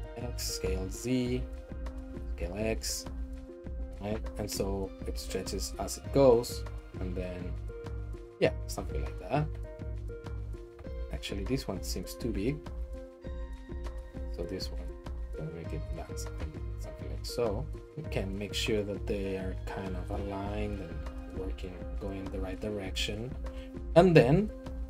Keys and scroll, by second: 0.0-0.4 typing, 2.0 s, 2.2 x, 5.6 shift+BackSpace, 5.8 shift+BackSpace, 6.4 shift+BackSpace, 8.8 Down, 8.9 Down, 9.1 Right, 9.3 Right, 9.5 Right, 10.3 Left, 11.7 Left, 12.6 s, 12.8 x, 14.1 Right, 14.6 s, 14.8 x, 16.2 Down, 16.5 Left, 16.7 Left, 17.1 Right, 17.4 Right, 20.6 Right, 20.9 Left, 21.1 Left, 21.2 Left, 21.5 Left, 21.8 Right, 22.0 Right, 22.1 Right, 22.2 Right, 22.5 Right, 24.0 Right, 24.2 Right.